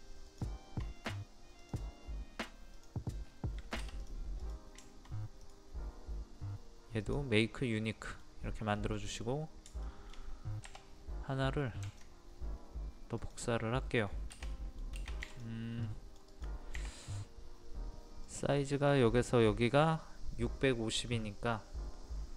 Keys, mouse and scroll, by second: 0.3 shift+click, 1.6 click, 3.2-3.5 scroll up 1, 4.0 click, 4.8 shift+middle click, 5.4 right click, 7.0 click, 7.4-7.8 scroll up 1, 7.8 middle click, 8.4-8.8 scroll up 1, 8.8 middle click, 9.9 shift+middle click, 11.8 ctrl+click, 13.6-15.3 middle drag, 15.3 click.